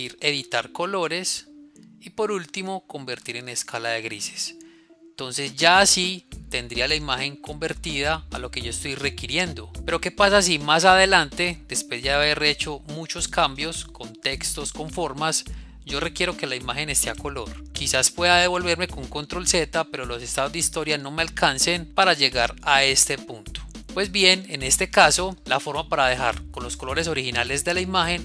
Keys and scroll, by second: 21.8 z, 26.9 ctrl+z.